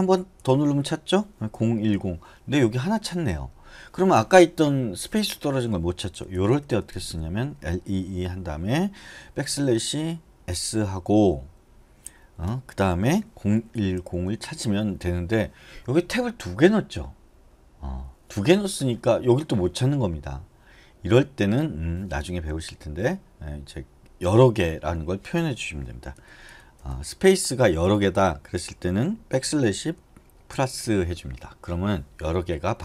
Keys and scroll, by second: 1.5-2.6 typing, 6.3-8.3 typing, 9.7 \, 10.7 s, 13.5-15.0 typing, 26.4 BackSpace, 26.7 BackSpace, 27.0 BackSpace, 29.6 ₩.